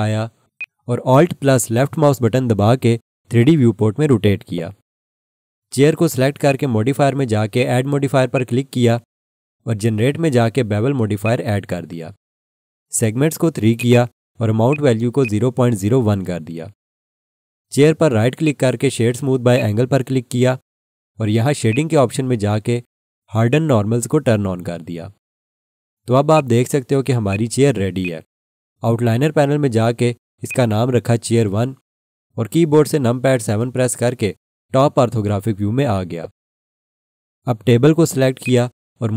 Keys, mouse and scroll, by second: 0.5 alt+click, 4.0 scroll up 1, 6.4 click, 13.9 double click, 14.7 click, 15.6-16.9 typing, 18.4 right click, 19.5 click, 27.3 alt+click, 27.3 alt+double click, 28.0 alt+click, 30.4 click, 31.2 F2, 31.4-33.1 typing, 33.5 Return, 35.0 7, 36.0 scroll down 1, 38.4 click.